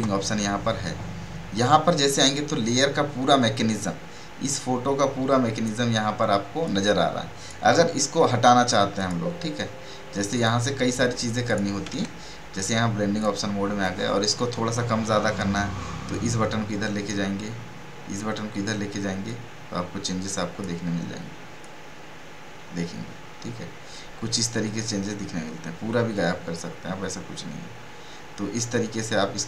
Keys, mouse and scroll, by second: 1.6-9.0 drag, 12.6 right click, 13.2 click, 16.1-29.4 drag.